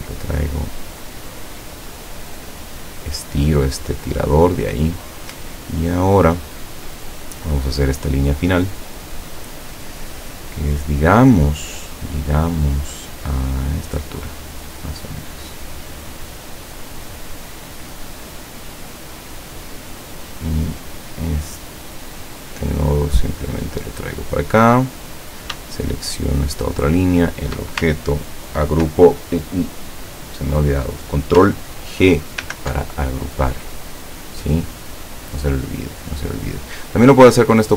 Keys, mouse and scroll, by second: 0.3-3.9 drag, 4.2-4.6 scroll down 2, 5.7 ctrl+scroll down 2, 7.8 click, 16.0 click, 16.8 click, 18.2 click, 20.2 click, 22.0-24.5 drag, 25.3 click, 26.4 shift+click, 27.1 shift+click, 32.5 ctrl+g.